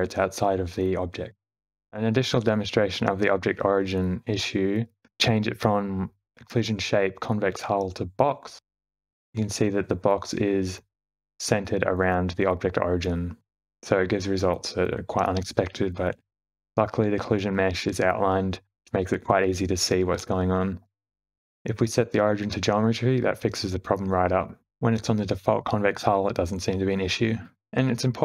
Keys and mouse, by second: 1.6 Tab, 1.6 e, 3.0 a, 3.7 s, 3.9 Tab, 3.9 q, 6.1 shift+Left, 6.1 space, 6.1 click, 8.4-9.4 drag, 15.8 space, 17.7-19.0 middle drag, 19.9 middle click, 21.3 space, 21.8-23.8 right drag, 24.8 shift+Left, 25.1 space.